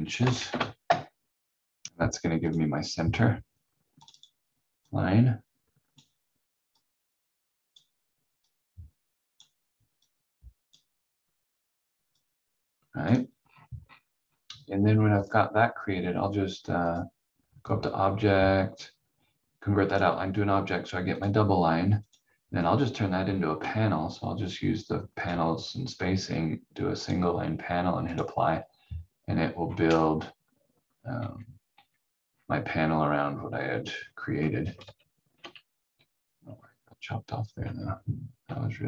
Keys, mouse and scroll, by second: 0.1 1, 0.5 Return, 2.5 click, 3.1-4.0 scroll up 1, 4.0 click, 13.4 scroll down 1, 15.2 click, 25.1 click, 29.6 scroll up 1, 31.1 v, 31.7 v, 32.2-32.5 scroll down 1, 34.0 scroll up 1, 34.8 ctrl+z, 36.4-37.6 scroll down 1, 37.6 v, 38.4 v.